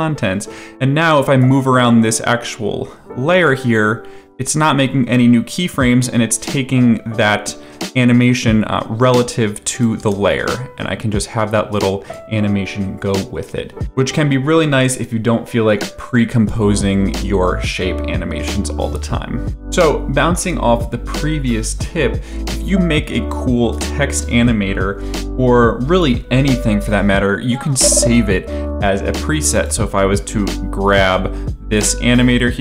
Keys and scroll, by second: 0.7 v, 10.0 space.